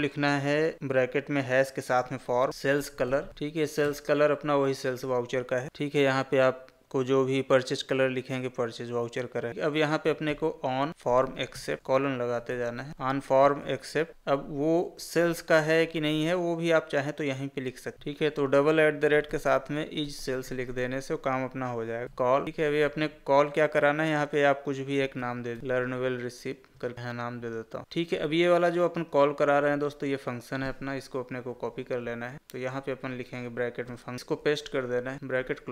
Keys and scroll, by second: 10.9 space, 12.9 Tab, 22.4 Tab, 31.5 ctrl+c, 34.3 ctrl+v.